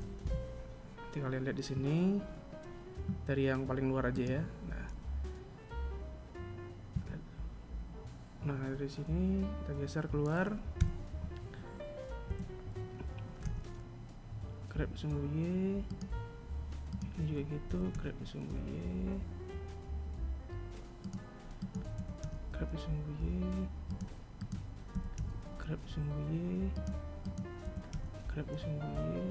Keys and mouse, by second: 3.7 right click, 6.5 KP_3, 10.3 KP_7, 11.9 g, 16.5 right click, 17.2 g, 21.1 right click, 21.5 g, 23.9 right click, 24.4 g, 26.8 right click, 27.2 g.